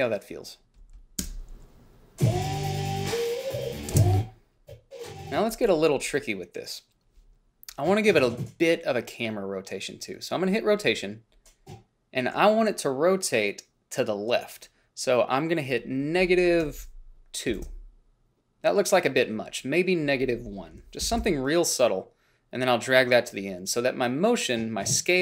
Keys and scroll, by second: 1.5 space, 4.2 space, 16.9 -, 17.8 2, 17.9 Return, 21.1 -, 21.4 1, 21.4 Return.